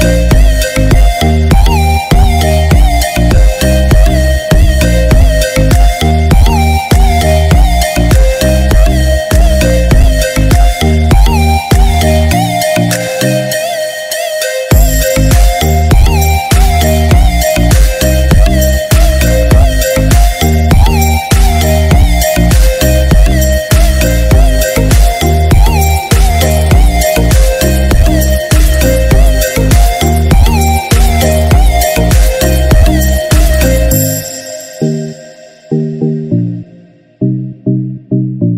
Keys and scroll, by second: 0.9 ctrl+=, 15.6 ctrl+-, 33.6 ctrl+-, 36.2 ctrl+=.